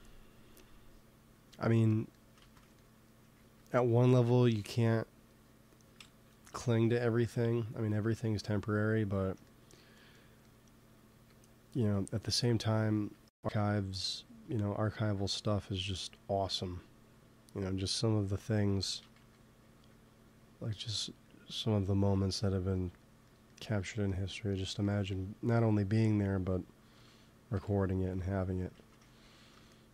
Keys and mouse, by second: 0.1 f, 2.4 ctrl+z, 3.3 ctrl+s, 6.4 KP_3, 11.0 f, 13.4 f, 13.5 click, 14.3 f, 15.4 f, 15.7-17.7 drag, 18.8 ctrl+z, 19.1 f, 19.7 f, 25.8 i, 26.9 p, 27.4 f, 27.5 click, 28.1-29.5 drag, 28.7 ctrl+z, 29.7 click.